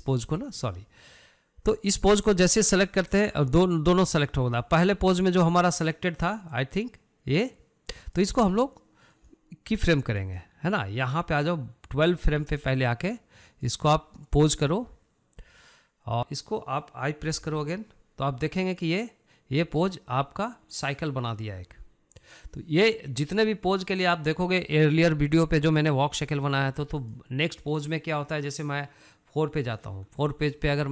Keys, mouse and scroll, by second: 3.6 click, 4.7 click, 7.3-10.1 drag, 10.9 click, 12.3-14.4 drag, 19.7-22.6 drag, 23.0-30.9 drag.